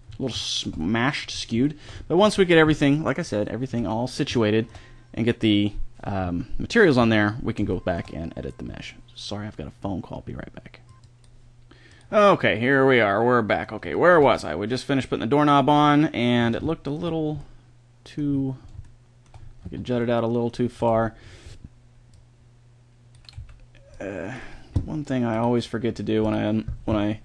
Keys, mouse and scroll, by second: 1.6-2.0 middle drag, 2.2 a, 7.4-11.2 middle drag, 12.6-13.6 middle drag, 14.0 middle drag, 14.2 middle click, 14.4 middle drag, 14.6 middle drag, 14.8-17.2 middle drag, 19.5 Tab, 20.5 a, 20.8 b, 23.2 c, 24.3-25.2 drag, 26.2-26.9 drag.